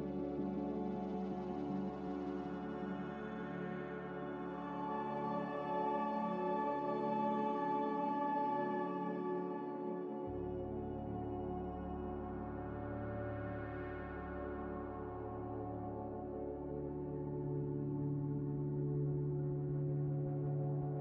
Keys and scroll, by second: 2.6 z, 3.9-4.8 typing, 6.2 c, 6.9 z, 8.2-9.1 typing, 15.7 z, 17.2-18.1 typing.